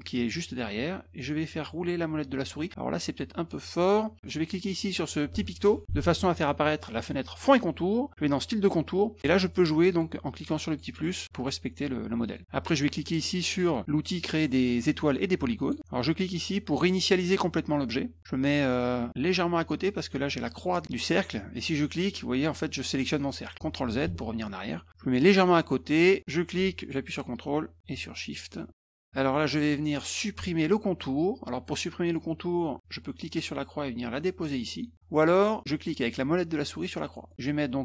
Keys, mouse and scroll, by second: 1.5 scroll up 2, 2.3 scroll down 2, 8.4 click, 9.4 click, 9.9 click, 10.2 click, 10.5 click, 10.7 click, 10.8 click, 11.0 click, 11.2 click, 11.3 click, 12.2 click, 15.6 click, 17.7 click, 22.0-23.5 drag, 24.1 ctrl+z, 25.5-29.1 drag, 33.2-34.9 drag, 37.3 middle click.